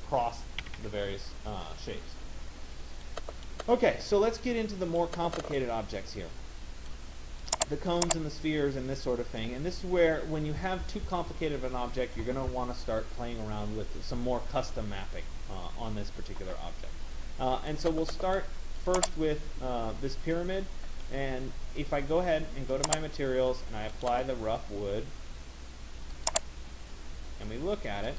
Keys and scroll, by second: 0.3 Escape.